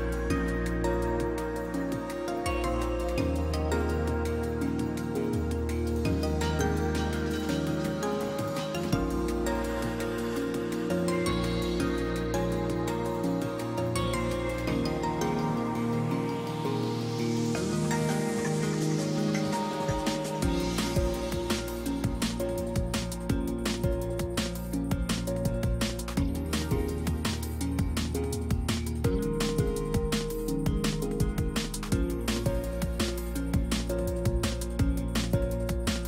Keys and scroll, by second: 10.3 space, 12.4 space, 17.2 space, 18.7 space, 33.6 ctrl+alt+z.